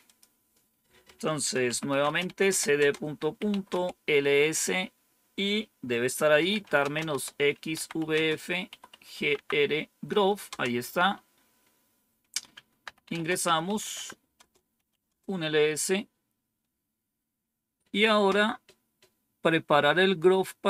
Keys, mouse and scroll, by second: 1.3-3.8 typing, 6.0-10.9 typing, 12.7-15.3 typing.